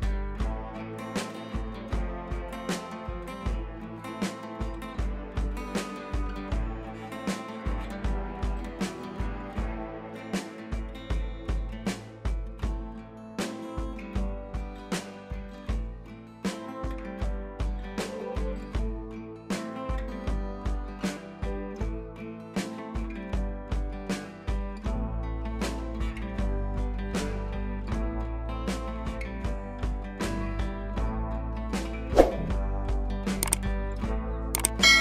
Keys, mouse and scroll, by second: 0.2 ctrl+l, 1.3-2.1 drag, 7.3 ctrl+y, 7.9 click, 9.7 ctrl+y, 11.3 ctrl+t, 12.5 ctrl+u, 13.3 ctrl+u, 14.7-22.1 drag, 22.7-24.9 drag, 25.6-27.3 drag, 29.7 ctrl+j, 31.4-35.0 drag, 33.2-34.7 drag.